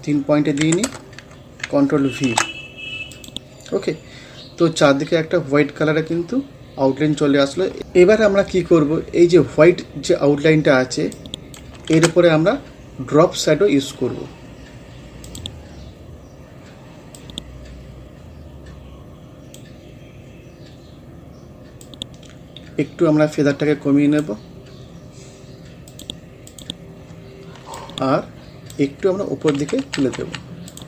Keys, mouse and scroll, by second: 0.9 Return, 2.3 ctrl+v, 3.2 click, 9.5 scroll up 1, 11.2 click, 12.0 ctrl+z, 15.3 click, 15.7 scroll down 1, 17.2-29.0 drag, 29.0 Up, 30.7 click.